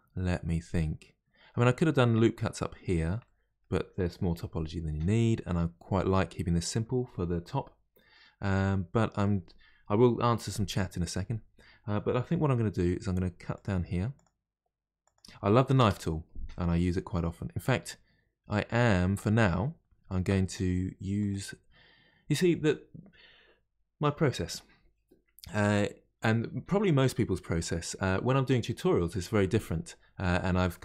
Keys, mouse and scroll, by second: 3.2-6.2 middle drag, 8.4-11.5 middle drag, 16.8-19.8 middle drag, 21.2-24.2 drag.